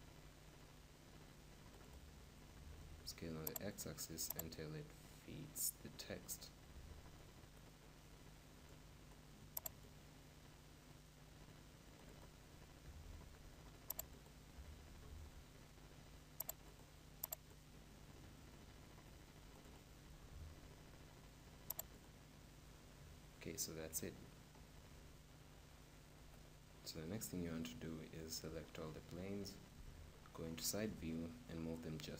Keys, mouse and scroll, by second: 2.3 s, 3.6-6.4 drag, 9.6-11.3 drag, 11.4 click, 12.7 s, 14.1-16.0 drag, 14.6 s, 16.6-19.2 drag, 19.9 s, 21.9-23.6 drag, 22.8-26.2 middle drag, 26.6-29.7 right drag, 29.6 KP_3, 30.2-32.1 middle drag.